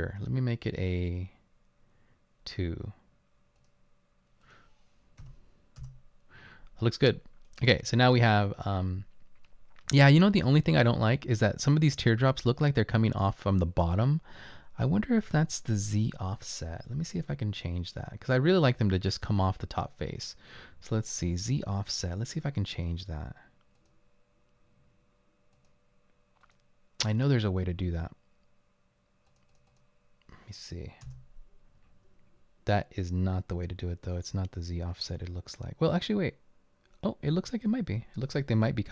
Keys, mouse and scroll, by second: 1.0-1.9 scroll down 2, 5.2 2, 5.8 Return, 31.1 Return, 38.8-38.9 typing.